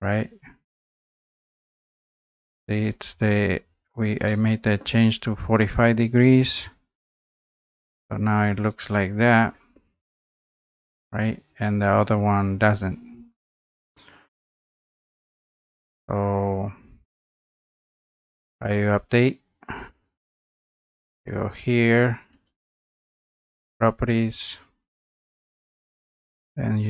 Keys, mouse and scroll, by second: 1.6 click, 2.0 scroll, 2.7 scroll up 3, 2.9-3.7 scroll down 6, 4.8 middle click, 5.0-5.5 scroll up 3, 6.7 click, 8.0 click, 8.3 scroll, 9.6 click, 9.8-10.3 scroll down 4, 10.9 click, 11.6 click, 19.9 click, 21.3 click, 22.5 right click, 23.9 click.